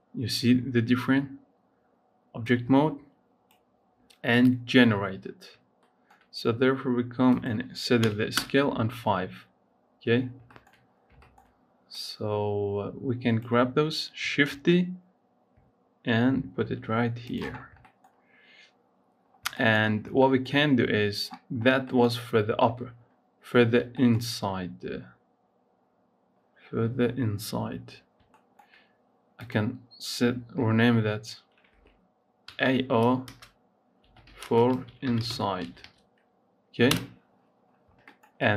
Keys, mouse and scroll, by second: 2.2 click, 5.6-7.2 shift+middle drag, 7.2-10.0 drag, 10.0-10.4 scroll down 5, 10.4 shift+middle click, 10.4 shift+scroll up 1, 10.7-11.1 scroll down 5, 11.1 shift+middle click, 11.9-14.3 drag, 14.3 shift+d, 17.5 scroll up 3, 17.8 shift+middle click, 18.0 scroll up 1, 19.2 scroll down 4, 19.4 shift+middle click, 19.7 scroll up 4, 20.0 shift+middle click, 29.2-36.7 drag, 37.4-37.8 scroll down 4, 37.8-38.5 shift+middle drag.